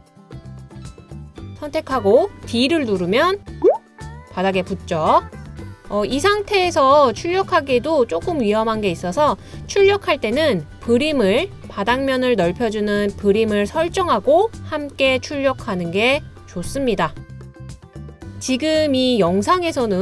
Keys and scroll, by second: 3.7 d.